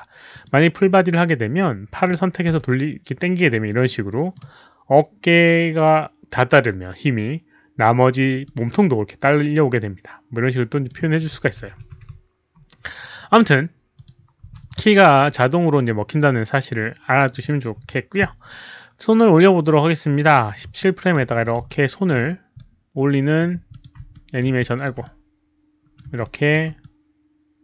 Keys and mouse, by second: 0.3 click, 1.9 click, 2.3-3.7 typing, 2.5 click, 2.6-4.3 middle drag, 4.3 click, 7.3 middle click, 7.3 click, 7.3 w, 8.4-10.8 middle drag, 9.1 click, 9.1 w, 10.9-12.3 typing, 11.1 click, 11.6 click, 13.5 middle click, 13.5 z, 13.9 click, 14.4 w, 15.2-17.2 drag, 17.2 middle click, 17.2 z, 19.0-19.7 typing, 19.2 click, 20.7-21.1 alt+drag, 21.2 e, 21.6-22.0 alt+middle drag, 22.5-23.3 drag, 23.5-26.4 typing, 23.6 alt+drag, 24.1 alt+middle drag, 24.5 alt+drag, 25.0-25.9 alt+middle drag, 26.2-26.5 alt+drag, 26.8-27.6 middle drag.